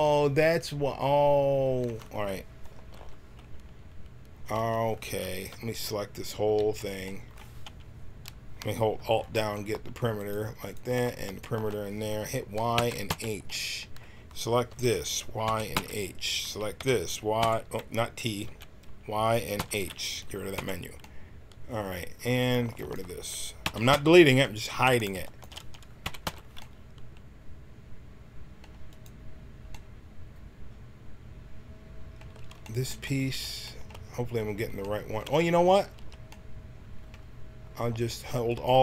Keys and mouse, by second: 2.9 alt+h, 4.5 a, 5.4 l, 6.3 l, 9.1-13.0 drag, 12.7 y, 13.0 h, 14.6 l, 15.4 y, 15.7 h, 16.7 l, 17.3 t, 18.4 y, 19.5 h, 20.5 t, 23.6 y, 23.8 h, 25.2 click, 26.0 y, 26.2 h, 26.6 click, 28.8-30.6 drag, 30.6 middle click, 35.9 a, 38.4-38.8 drag.